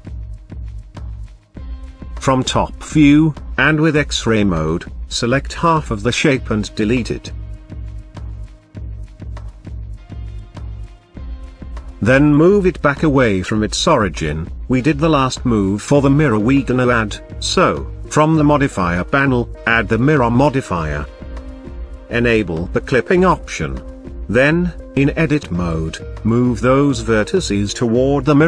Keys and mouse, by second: 1.1 click, 1.7 Tab, 3.8 z, 5.6 click, 7.3 x, 11.5 a, 12.2 g, 12.4 x, 14.1 drag, 16.6 g, 16.8 x, 17.6 Tab, 19.7-21.0 drag, 23.1 click, 24.5 Tab, 25.7 click, 27.2 g, 27.4 x.